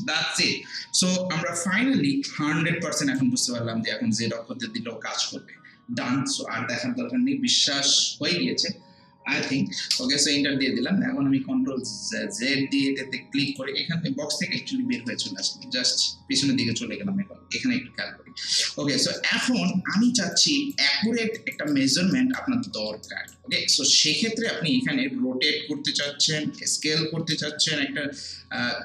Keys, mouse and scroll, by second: 1.7-5.4 drag, 7.6 0, 9.9 Return, 13.5 click, 14.9 ctrl+z, 16.1 scroll up 1, 16.6 alt+middle click, 18.7 alt+middle click, 19.2 alt+right click, 19.7 alt+middle click, 20.1 alt+right click, 20.9 alt+middle click, 21.4 alt+right click, 21.7 alt+click, 22.1 alt+right click, 22.7 alt+middle click, 23.1 alt+right click, 23.9 alt+right click, 24.3 alt+middle click, 25.4-28.8 drag.